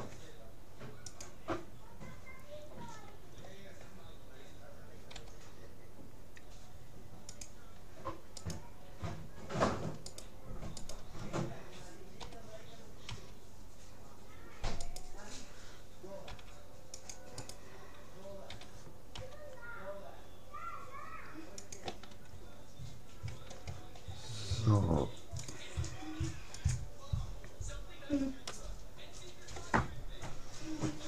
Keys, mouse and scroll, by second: 5.1 g, 8.5-10.0 right drag, 10.1-12.3 right drag, 12.2 g, 12.6 right click, 16.3 c, 17.5-19.2 right drag, 18.5 g, 23.3 a, 25.5-27.1 drag, 28.1-29.9 middle drag, 30.9-31.0 middle drag.